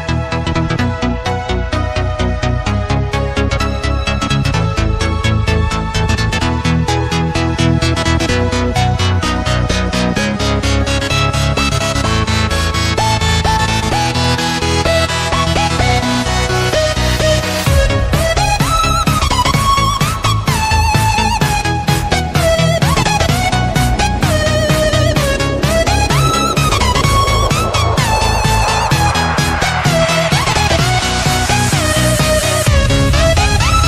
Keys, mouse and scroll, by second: 1.8 click, 2.5-3.5 scroll up 3, 3.5 click, 3.9 Tab, 5.1 click, 6.2-7.1 scroll down 1, 7.1 click, 7.6 click, 8.1 KP_7, 9.3 e, 10.3-13.2 drag, 13.2-14.4 scroll up 2, 14.4 click, 14.9-15.9 scroll up 2, 15.9-21.8 drag, 21.8 Tab, 22.2 Tab, 23.2 click, 23.6 click, 24.5 b, 25.6-28.2 drag, 28.2-29.7 scroll down 3, 29.7-33.8 drag.